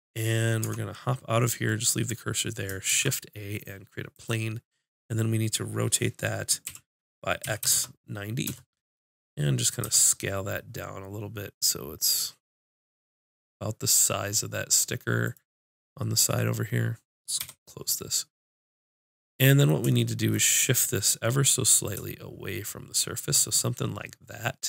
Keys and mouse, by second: 0.6 Tab, 2.9 shift+a, 6.6 r, 9.8 s, 15.3-17.1 drag, 17.4 n, 20.7-23.6 drag.